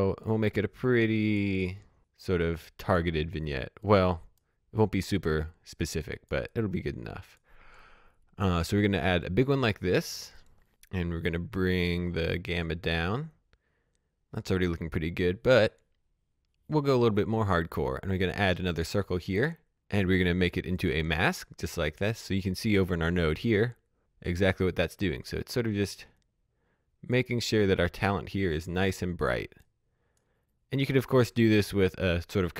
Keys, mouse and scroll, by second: 8.4 click, 11.6 scroll down 1, 18.1 click, 20.4 click, 22.7 click, 25.9 click.